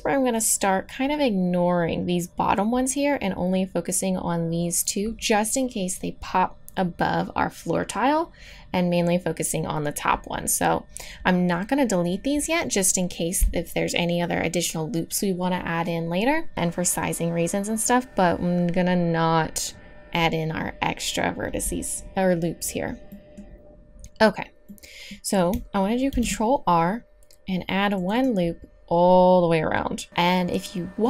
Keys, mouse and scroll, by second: 23.1-25.2 middle drag, 26.1 ctrl+r.